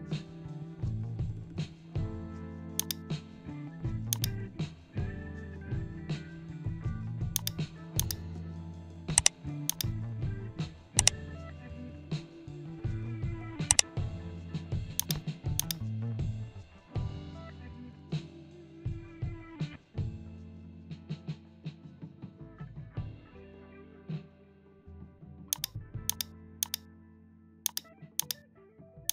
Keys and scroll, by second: 17.0 ctrl+0.